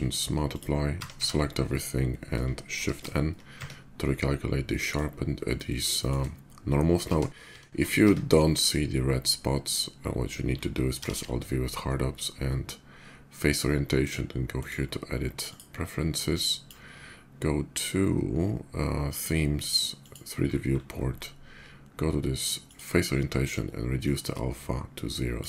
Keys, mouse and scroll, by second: 0.1 click, 0.7 Tab, 0.9 a, 1.4 Tab, 2.9 shift+n, 3.1 Tab, 4.4-4.7 middle drag, 5.3 middle drag, 5.7 shift+middle click, 6.8 ctrl+z, 7.3 ctrl+z, 8.1 Tab, 10.7 alt+v, 14.2 click, 15.1 click, 16.1 click, 18.7 click, 19.6 click, 20.0 middle click, 20.0-20.7 scroll up 3, 20.4 middle click, 20.6 middle click, 20.9-22.4 middle drag, 22.4 click, 23.6-25.1 drag.